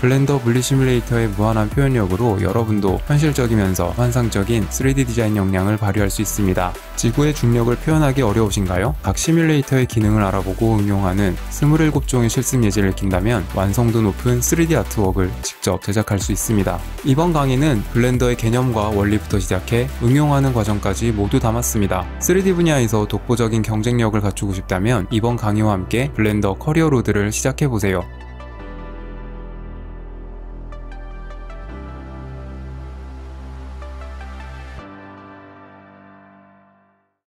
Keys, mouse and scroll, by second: 17.4-18.5 drag, 18.7 click.